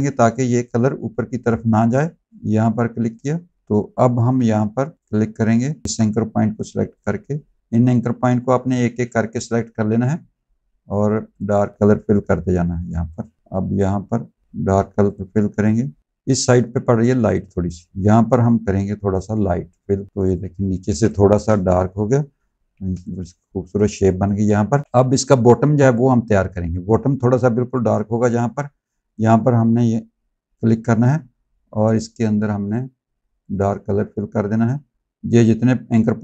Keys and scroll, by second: 4.1 a, 20.9 space, 22.6 z, 23.6 space.